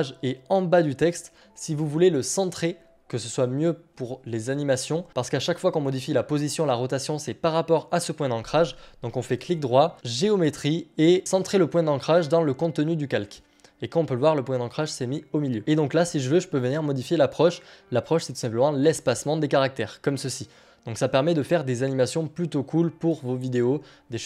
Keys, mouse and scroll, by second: 9.3-11.2 right drag, 13.2-17.5 drag, 23.0-24.2 drag.